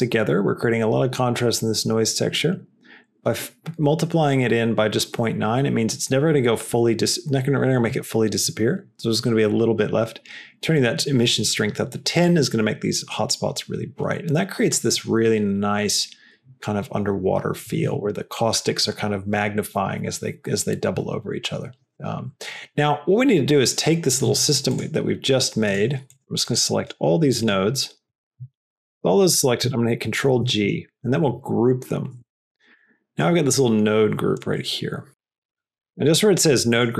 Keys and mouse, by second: 23.5 click, 24.0 drag, 24.6 shift+click, 25.6 shift+click, 26.0 shift+click, 26.3 shift+click, 26.7 shift+click, 27.3 shift+click, 28.5 shift+click, 28.8 middle click, 30.3 ctrl+g, 32.1 Tab, 32.8 middle click, 33.5 click, 34.4-35.5 drag, 36.7-36.9 drag.